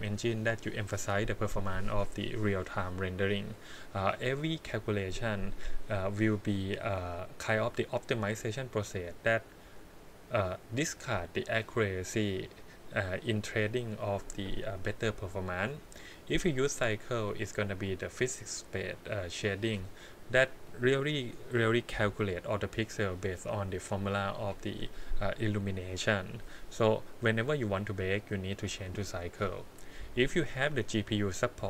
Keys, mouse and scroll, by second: 31.5-31.6 drag.